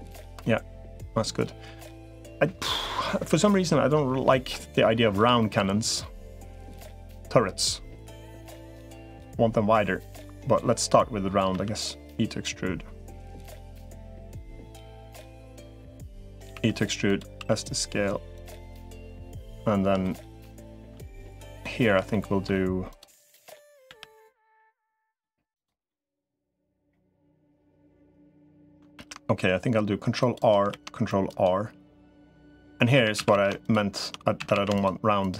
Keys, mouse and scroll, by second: 0.0-1.6 middle drag, 11.4 e, 16.4 e, 17.2 s, 18.5 middle click, 19.8 middle click, 21.9 middle click, 23.8 l, 24.0-25.0 middle drag, 25.4 click, 25.7 middle click, 26.7 middle click, 27.9 middle click, 28.8 ctrl+r, 30.6 ctrl+r, 32.8-34.4 typing, 34.6 alt+shift+click.